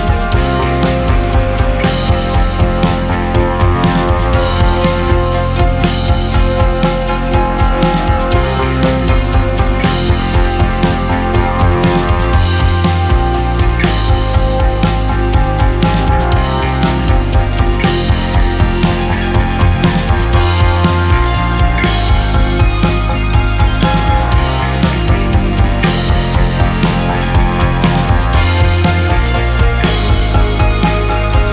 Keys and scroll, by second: 3.2 w, 5.0 space, 6.0 space, 6.9 space, 8.5 space, 9.1 space, 9.8 space, 11.3 ctrl+z, 12.0 space, 13.0 space, 18.7 z, 20.4 q, 20.7 Delete, 22.9 space, 23.7 space, 24.9 n, 26.9 space, 27.8 space, 28.5 q, 29.5 ctrl+[, 30.2 space, 30.8 space.